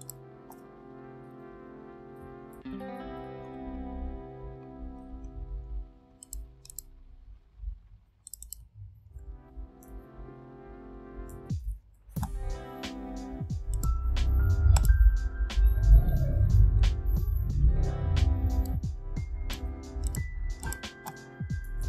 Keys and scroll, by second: 1.1 ctrl+a, 1.4-3.1 typing, 8.7 ctrl+a, 9.6-12.0 typing, 21.3-21.8 typing.